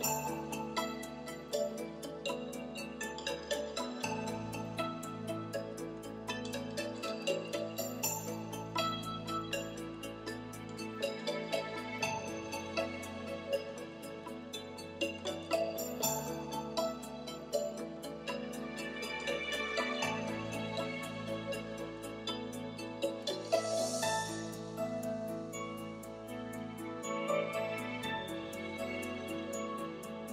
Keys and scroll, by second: 25.8 shift+i.